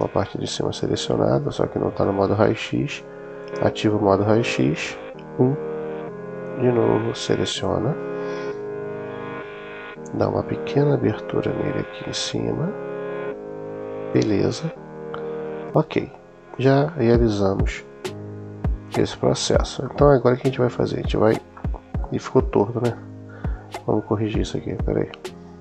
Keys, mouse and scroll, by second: 2.0 middle click, 3.2 click, 4.7 KP_1, 6.3-9.7 drag, 10.3 s, 13.9 click, 16.4 click, 18.8 click, 19.7-21.2 middle drag, 21.4 middle click, 23.0 super+z, 23.4 super+z, 23.9 super+z, 24.5 super+z, 25.1 super+z.